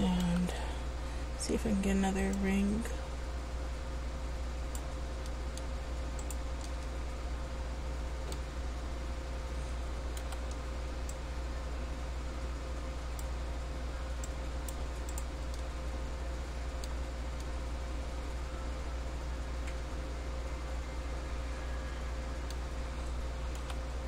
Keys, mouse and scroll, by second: 0.4 c, 6.8 middle click, 10.4 c, 15.3 right click, 15.7 middle click, 23.8 c.